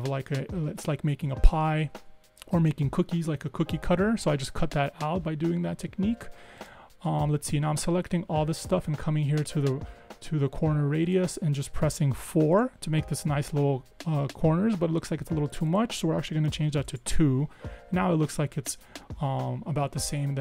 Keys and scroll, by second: 12.3 4, 12.6 Tab, 16.7 2, 17.0 Tab.